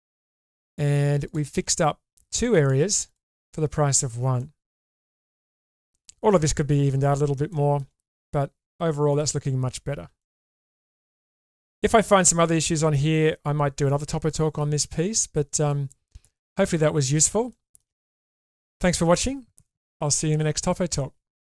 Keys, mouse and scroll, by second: 1.5 g, 4.3-6.0 middle drag, 7.5 shift+middle click, 8.3 middle click, 10.2 shift+middle click, 10.7 middle click, 11.9 middle click, 13.9 middle click, 15.7-17.2 middle drag, 17.5 shift+middle click, 18.0 middle click.